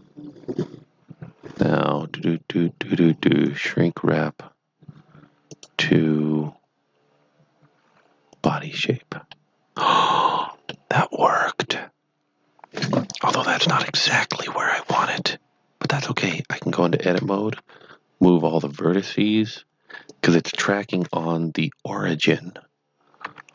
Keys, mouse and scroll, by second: 3.3 click, 8.3 click, 9.3 middle click, 13.5 KP_1, 16.2 Tab, 17.1-17.6 typing, 20.1 click, 20.9 KP_3, 23.1 KP_3, 23.2 g.